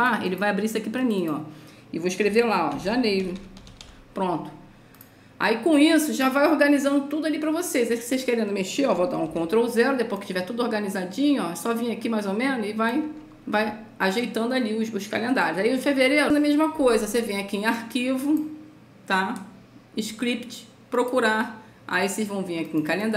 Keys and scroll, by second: 2.4-4.4 typing, 9.6 ctrl+0.